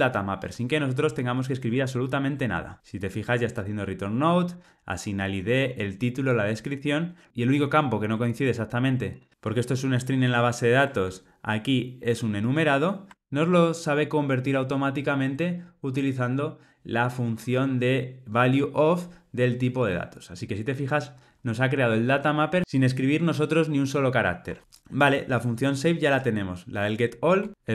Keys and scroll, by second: 1.7 Tab.